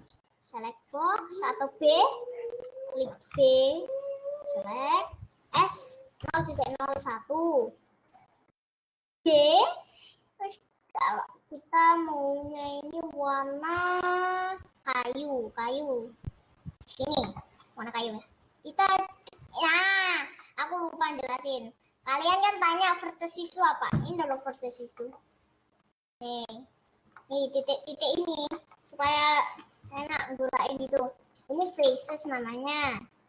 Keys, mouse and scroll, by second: 2.0 click, 5.0 b, 6.2 s, 9.3 g, 17.3 middle click, 17.5-18.0 scroll down 3, 18.0-18.9 scroll up 3, 20.1 scroll up 4, 20.7-21.6 scroll up 2, 24.1 click, 24.3 middle click, 24.7 scroll up 2, 25.1-26.3 middle drag, 26.3 click, 27.3 middle click, 27.5-28.2 scroll down 2, 28.4 click, 28.6 middle click, 29.3 g, 30.1 ctrl+z, 31.3-32.3 drag, 32.3 middle click, 32.9 g.